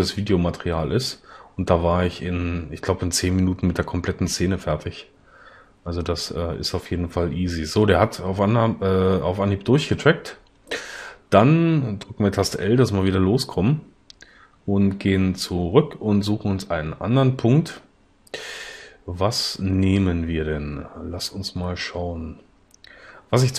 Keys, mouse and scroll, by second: 15.5-15.9 drag.